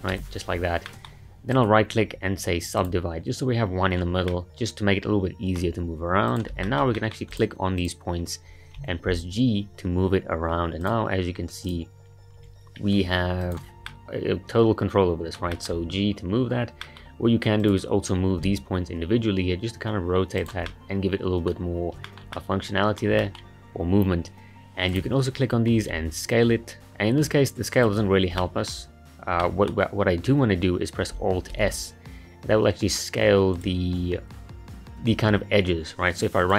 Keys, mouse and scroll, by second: 0.1 a, 0.9-1.5 middle drag, 1.5-4.3 right drag, 4.3-6.3 middle drag, 6.3 click, 6.6-7.3 shift+middle drag, 7.3 click, 7.8 click, 8.8 g, 11.7 click, 12.4 g, 13.9-15.8 middle drag, 15.8-16.8 scroll up 1, 16.8-17.6 middle drag, 17.6 click, 18.4 g, 20.7-21.7 middle drag, 21.7-22.1 scroll up 1, 22.1-24.9 shift+middle drag, 24.9 click, 25.9 s, 28.4-31.5 middle drag, 31.5 alt+s, 36.4-36.5 right drag.